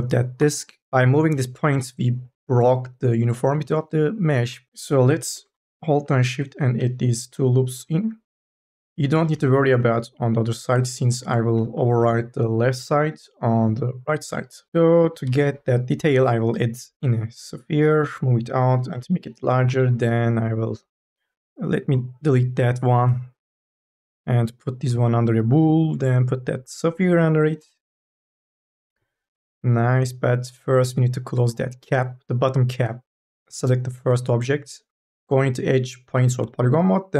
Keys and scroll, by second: 0.2 Delete, 1.2 q, 5.2 k, 5.7 l, 8.9 4, 9.2 e, 11.6 3, 11.8 e, 14.7 4, 14.8 5, 15.1 r, 17.8 e, 18.8 t, 19.5 e, 22.8 Delete, 34.8 2, 35.9 1, 36.2 3.